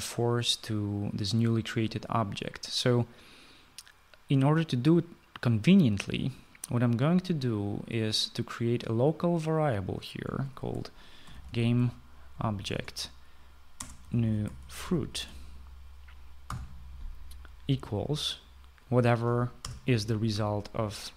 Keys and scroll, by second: 11.1-12.9 typing, 13.3 Return, 14.4-16.3 typing, 17.5 typing, 20.2 BackSpace.